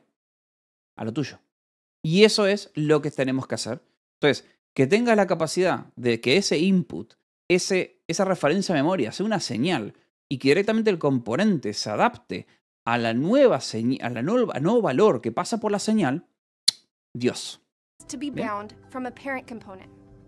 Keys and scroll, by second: 2.1 h, 2.4 j, 3.0 j, 3.5 k.